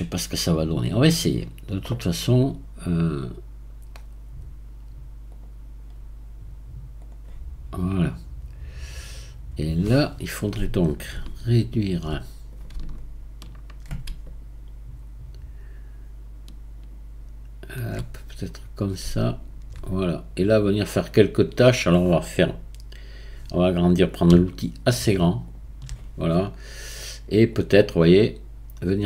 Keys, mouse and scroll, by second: 7.1-8.0 drag, 8.0-17.5 right drag, 18.1-24.3 right drag, 24.3-25.7 f, 27.5-29.0 drag.